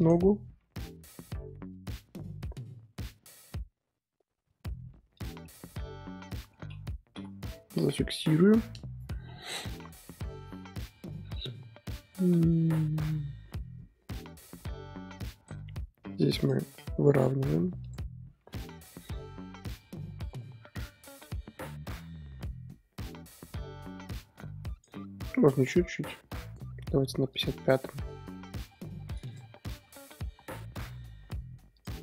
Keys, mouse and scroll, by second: 0.3 r, 5.4-7.1 middle drag, 7.1 i, 7.6 KP_1, 9.1 KP_3, 12.1-15.2 drag, 16.4 click, 16.7 r, 18.4 i, 19.8-24.9 drag, 25.3 r, 27.3 click, 28.0 r, 29.8 i, 31.7-32.0 drag.